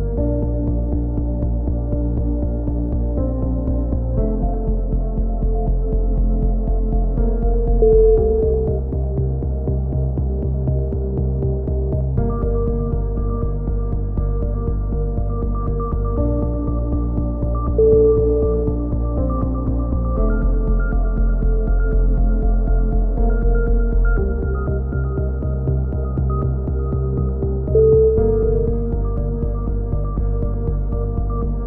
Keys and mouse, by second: 0.2 KP_3, 0.4 z, 1.0 click, 3.9-7.2 drag, 7.2 a, 7.3 z, 9.9 KP_3, 10.1 z, 12.9 a, 13.0 z, 13.2 z, 13.9 z, 14.0 Tab, 16.2 KP_1, 16.5 z, 18.7 Tab, 20.2 a, 20.4 z, 20.5 Tab, 22.2 KP_7, 22.5 z, 23.7-26.3 typing, 24.2 Tab, 24.8-25.2 drag, 27.5-29.6 typing, 30.9 KP_3, 31.2 z, 31.5 z.